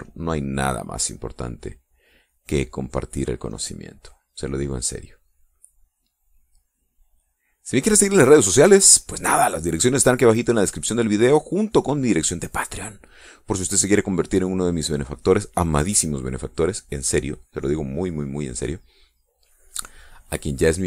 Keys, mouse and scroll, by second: 1.2-3.7 drag, 4.3-9.7 drag, 11.0-13.5 drag, 13.8-15.6 drag, 20.1 click.